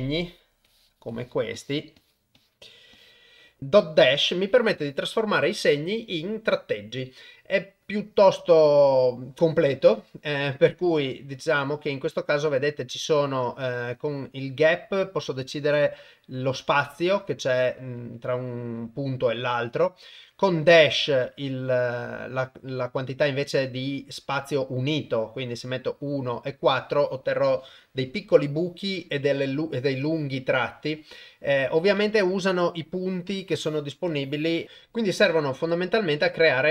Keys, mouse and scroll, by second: 0.2 click, 0.6 click, 1.1 click, 1.5 click, 2.0 click, 2.3 click, 2.9 click, 3.6 click, 14.6 click, 15.5 click, 15.7 click, 16.0 click, 16.1 click, 17.8 click, 18.0 click, 18.1 click, 18.3 click, 18.5 click, 24.5 click, 24.6 click, 24.9 click, 26.1 click, 32.4 Tab.